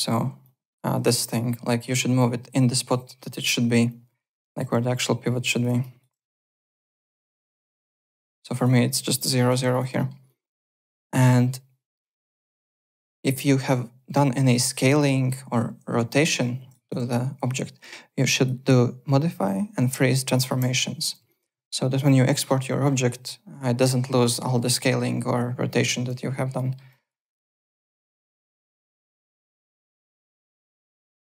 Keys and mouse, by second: 0.4 click, 2.2 click, 2.9 x, 3.5 x, 3.9 click, 4.6 x, 4.9 click, 5.6 x, 5.8 click, 6.1 x, 6.4 click, 6.9 x, 7.1 click, 7.4 `, 7.7 click, 8.2 click, 8.5 `, 8.5 click, 9.3 click, 9.9 middle click, 10.2 click, 11.1 click, 12.9 r, 13.4 click, 14.4 click, 14.4 ctrl+click, 14.4 ctrl+z, 14.8 r, 16.2 click, 16.7 ctrl+click, 16.8 ctrl+z, 17.0 w, 18.3 click, 20.3 click, 21.3 alt+click, 21.5 w, 26.5 alt+middle click, 26.9 alt+click, 27.1 alt+right click, 27.4 alt+click, 28.9 alt+Tab, 29.2 alt+click, 30.3 alt+Tab, 30.7 alt+click, 31.0 alt+middle click, 31.2 alt+click.